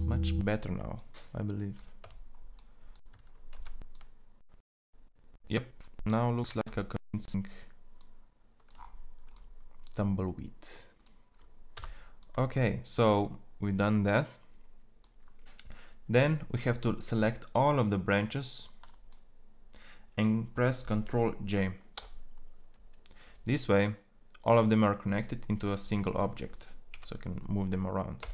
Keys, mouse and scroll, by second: 1.4 Tab, 3.0 shift+z, 7.4 shift+z, 11.7 Tab, 18.2-21.8 drag, 21.8 ctrl+j, 26.6 g.